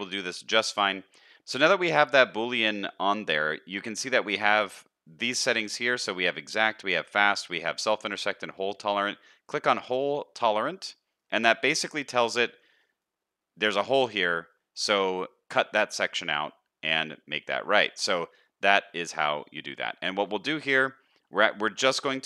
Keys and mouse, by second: 0.4 middle click, 1.4 z, 11.2 middle click, 13.0-13.8 middle drag, 14.5 middle drag, 15.8-16.8 middle drag, 17.8 middle click, 19.8-20.2 shift+middle drag, 20.5 middle click.